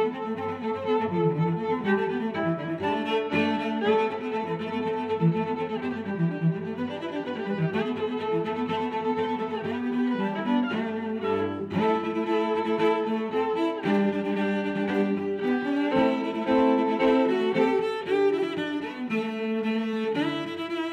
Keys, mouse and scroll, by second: 0.4 click, 1.6 click, 2.1 click, 3.1 click, 7.0 middle click, 8.2 click, 8.5 middle click, 9.3 click, 10.3 click, 10.4 click, 10.5 click, 10.6 click, 13.6 Right, 13.9 Left, 14.1 0, 14.4 Return, 15.7 click, 16.9 click, 19.4 click, 19.6 click, 20.2 click.